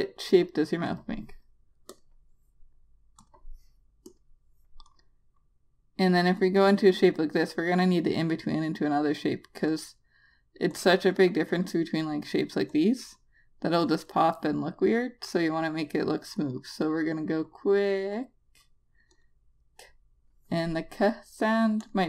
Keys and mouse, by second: 10.2 click, 11.6 double click, 13.2 click.